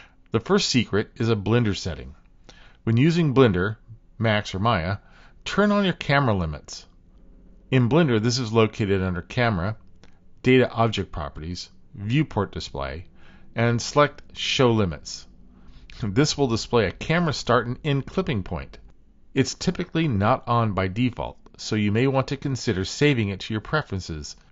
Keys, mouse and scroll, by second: 1.1 click, 1.2 typing, 2.4-4.7 middle drag, 4.6 typing, 5.9 click, 9.8 click, 11.7 click, 17.2-19.3 shift+middle drag, 20.5 middle click, 21.0 click, 21.2 middle click, 21.5 shift+click, 22.0 shift+middle click.